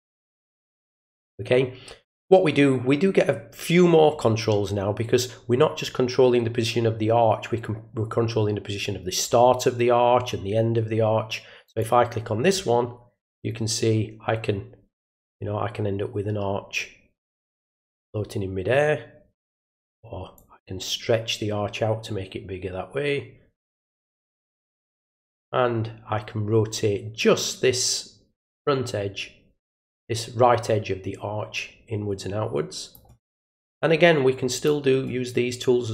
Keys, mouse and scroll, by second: 11.6 click, 13.3-19.5 drag, 20.3-23.9 drag, 24.5-32.9 drag, 34.5 click.